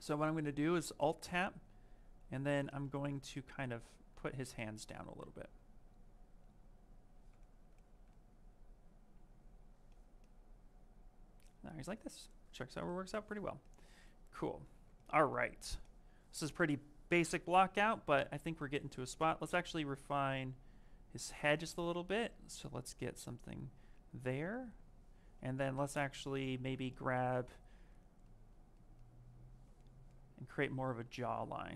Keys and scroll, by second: 24.0 s, 26.4 s.